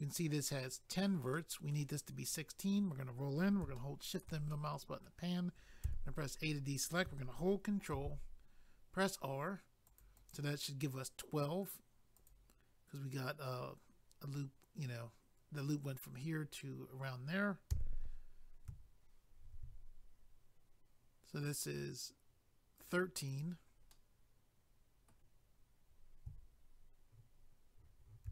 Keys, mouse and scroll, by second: 1.3 middle click, 2.2 scroll up 1, 4.5 middle click, 5.8 a, 7.9 ctrl+r, 9.8 click, 10.0 click, 10.2 click, 10.3 double click, 12.1 click, 12.3 click, 17.7 a, 19.4 ctrl+r, 22.8 click, 22.9 click, 23.3 click, 23.4 click, 23.9 middle click, 28.2 ctrl+r.